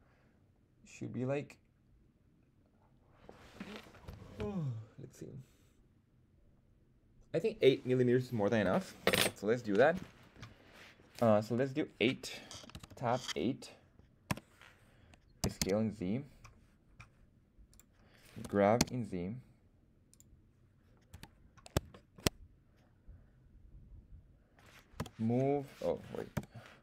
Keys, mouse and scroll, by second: 15.3 s, 15.5 z, 17.6 click, 18.3 g, 18.7 z, 20.0 click, 21.0 KP_1, 21.8 shift+middle drag, 24.9 m, 26.2 /.